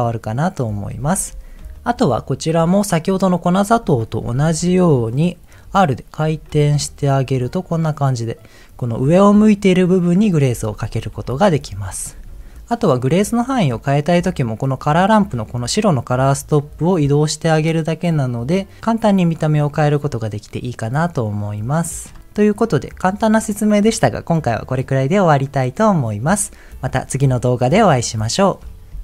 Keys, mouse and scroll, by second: 0.7 scroll down 1, 1.7 shift+middle click, 3.6 shift+middle click, 4.4 Tab, 4.9 middle click, 5.6 r, 6.8 click, 7.2 Tab, 7.6 middle click, 9.0-10.7 middle drag, 11.1 ctrl+z, 11.5 ctrl+z, 12.2 Tab, 12.6 click, 12.7 ctrl+z, 13.2 middle click, 13.8 middle click, 16.1-22.0 drag.